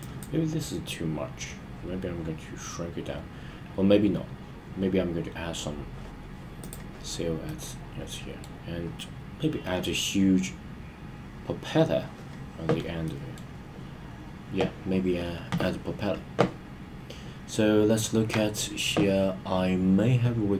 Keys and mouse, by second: 0.0 drag, 7.5-8.5 middle drag, 13.1 middle click.